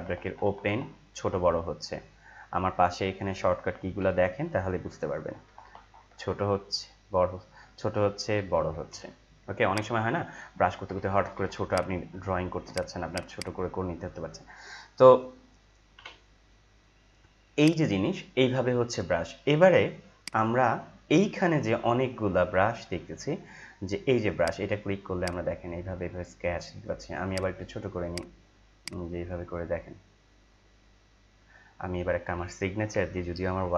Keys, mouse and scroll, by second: 0.0-1.3 typing, 5.0-6.1 typing, 7.9-8.9 typing, 9.7 click, 10.7-12.8 typing, 11.7 click, 12.7 click, 13.1-15.9 drag, 15.9 Delete, 17.6 click, 20.2 right click, 22.5 scroll down 1, 23.3-24.4 scroll up 1, 24.4-27.2 drag, 27.2 right click, 28.1-33.1 drag, 32.9 ctrl+Delete.